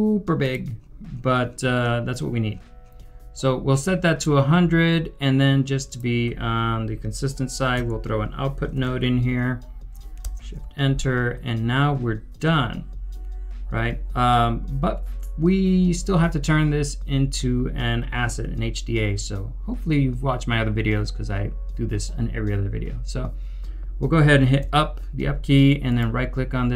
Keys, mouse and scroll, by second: 7.7 scroll, 7.8 Tab, 8.3-9.3 typing, 10.2 shift+Return, 12.9 shift+Return, 13.0 scroll down 1, 13.5 scroll up 1, 14.3 middle click, 24.6 u, 25.8 right click.